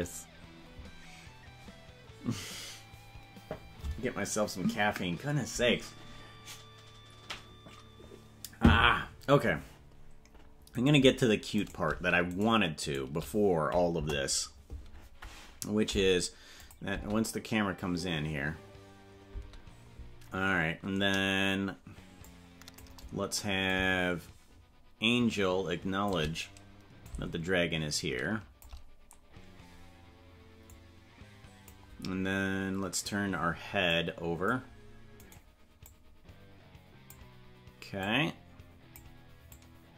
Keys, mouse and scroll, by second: 11.8 right click, 12.4-13.1 shift+right drag, 13.9 KP_0, 16.6 click, 16.9 space, 19.4 space, 22.3 click, 23.6-26.1 shift+drag, 27.0-28.6 drag, 30.7-31.8 drag, 33.9 click, 35.3 right click, 35.8-37.1 drag, 38.0 click, 39.5 click.